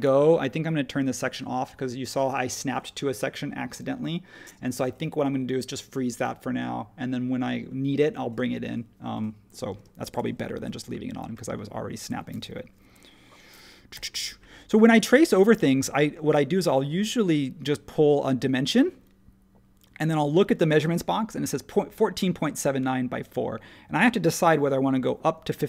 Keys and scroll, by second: 9.7 space, 10.5 super+1, 13.9 r.